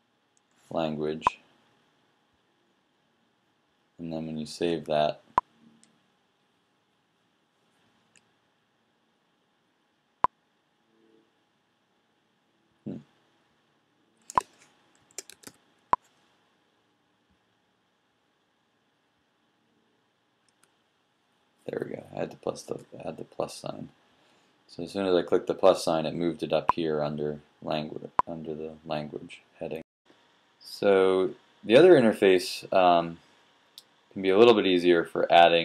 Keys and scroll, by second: 15.5-16.7 typing.